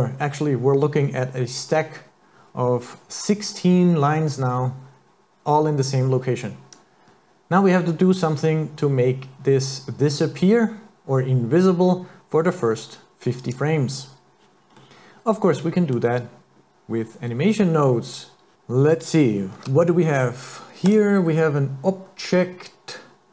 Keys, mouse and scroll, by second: 6.8 click, 14.8 middle click, 18.5 click, 19.6 shift+a.